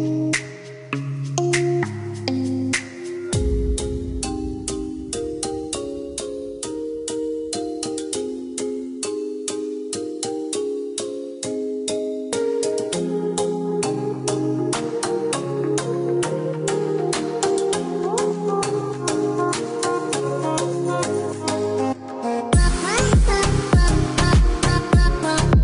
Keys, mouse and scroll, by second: 0.8 Escape, 2.5 click, 7.3 click, 8.1 KP_0, 8.3 KP_Decimal, 8.7 KP_7, 9.4 KP_Enter, 10.1 Escape, 11.3 click, 13.7-14.1 scroll down 1, 14.1 scroll up 1, 16.6-17.1 scroll down 1, 17.9 click, 23.3 click, 24.3-25.6 scroll down 1.